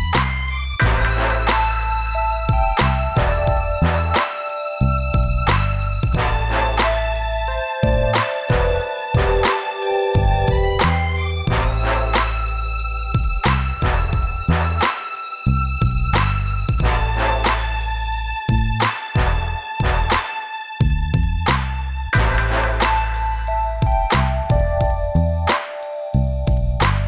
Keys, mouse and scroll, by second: 0.3 click, 1.8 click, 5.7 click, 6.7 click, 8.2 click, 9.1 click, 13.4 click, 15.8 click, 17.0 click, 19.0 click, 21.6 click.